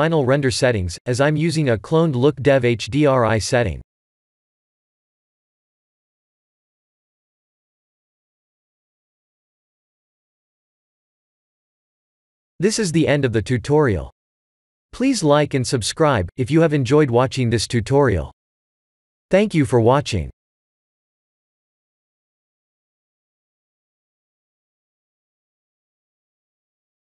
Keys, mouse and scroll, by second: 0.1 click, 2.1 click, 8.5 click, 10.1 ctrl+s.